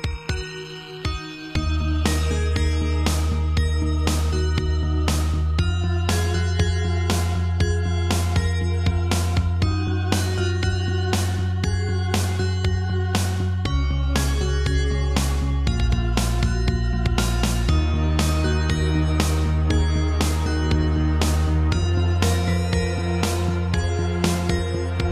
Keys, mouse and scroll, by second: 4.7 click, 4.8 click, 6.2 click, 6.3 click, 9.6 r, 11.1 click, 12.1 click, 14.0 alt+r, 14.6 r, 15.8 click, 16.8 click, 16.9 click, 17.5 alt+r, 18.8 click, 19.8 r, 20.6 click, 21.3 shift+middle click, 22.8 click, 23.0 click, 24.0 shift+click, 24.9 scroll up 2.